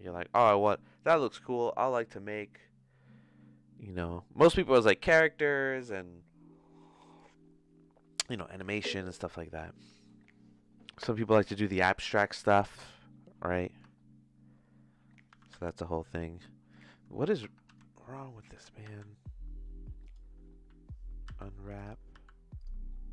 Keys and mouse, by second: 13.8 Tab, 15.3 g, 17.1 Tab, 17.4 Tab, 17.6 a, 18.7 r, 21.2 u, 22.1 u.